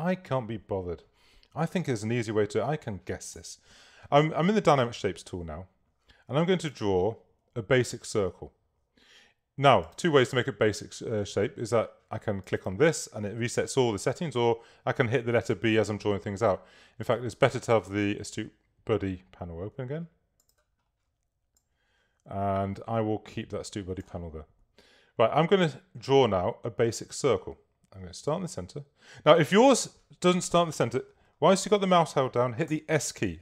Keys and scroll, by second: 3.4 s, 32.8 s.